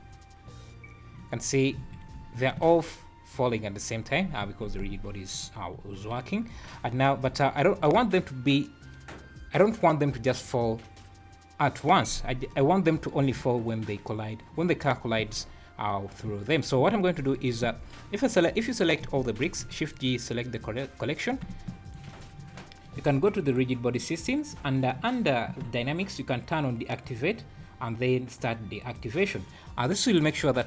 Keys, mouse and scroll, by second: 1.8 Escape, 2.6 space, 4.4 Escape, 5.3 click, 5.7 `, 7.1-7.5 scroll up 1, 12.5 scroll down 2, 13.6 click, 15.2 space, 16.3 Escape, 16.7 scroll up 5, 17.5 click, 19.4 shift+g, 21.8 shift+click, 23.4 click, 24.2-24.8 scroll down 14, 27.0 click, 27.5 scroll down 2, 28.8 click, 29.6 scroll down 1.